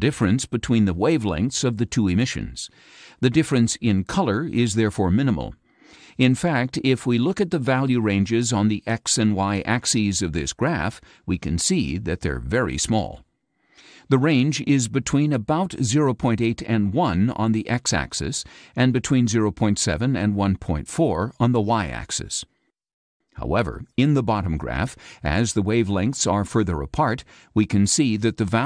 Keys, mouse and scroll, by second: 0.8 click, 1.9 click, 14.7 click, 16.5 click.